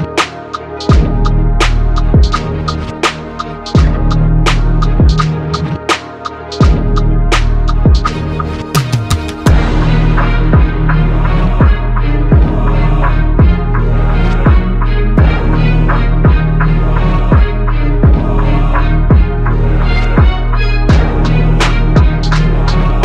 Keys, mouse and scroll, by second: 3.9 KP_7, 4.7 BackSpace, 6.9 KP_7, 11.6 KP_3.